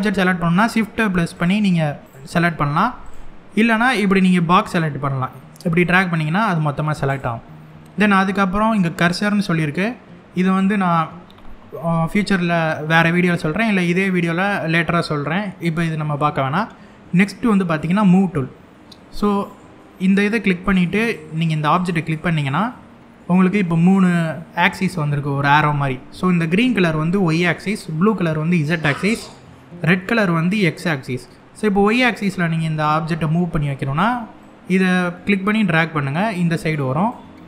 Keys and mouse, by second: 1.0 shift+click, 3.8 click, 5.4 click, 8.7 click, 19.7 click, 22.4-22.8 middle drag, 34.1-36.7 drag.